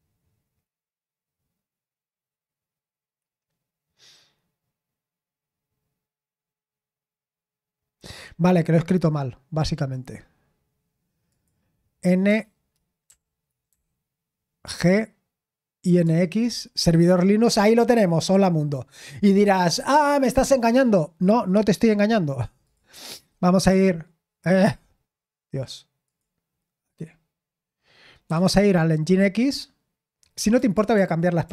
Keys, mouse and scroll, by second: 9.8 click, 11.2 click, 16.0 Return, 22.6 click, 26.0 click, 30.4-31.2 typing, 31.4 super+l.